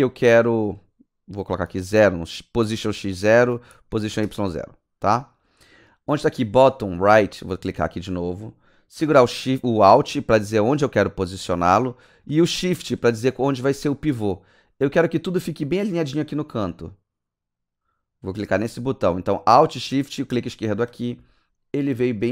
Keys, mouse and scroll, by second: 0.7 click, 1.4 click, 1.9 click, 2.9 KP_0, 3.4 Return, 3.7 click, 4.0 KP_0, 4.2 Return, 7.7 Return.